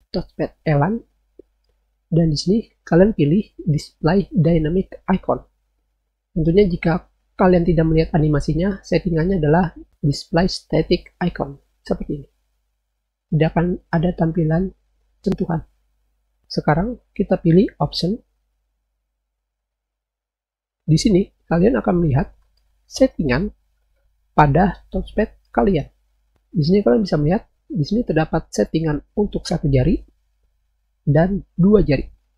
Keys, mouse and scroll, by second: 10.4 click, 14.0 click, 18.5 click, 31.6 click.